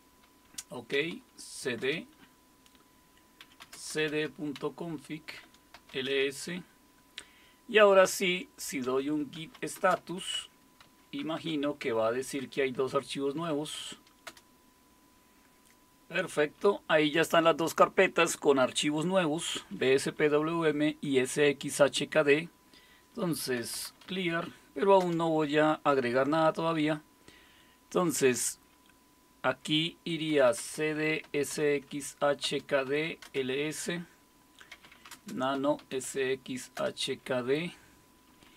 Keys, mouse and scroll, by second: 0.0-6.6 typing, 5.4 Return, 9.1-12.4 typing, 13.5-14.8 typing, 23.3-24.7 typing, 25.0 Return, 30.1-36.3 typing, 36.8 Return, 38.3 Down, 38.5 Down.